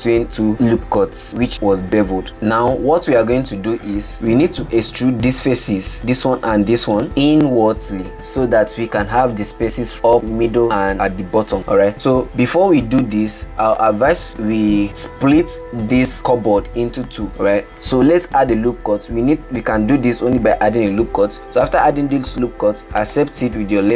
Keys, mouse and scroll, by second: 2.3-4.1 middle drag, 4.1-5.1 scroll up 11, 5.1 click, 6.8 shift+click, 12.2-13.6 scroll down 8, 13.6-14.1 scroll down 4, 20.6 ctrl+r.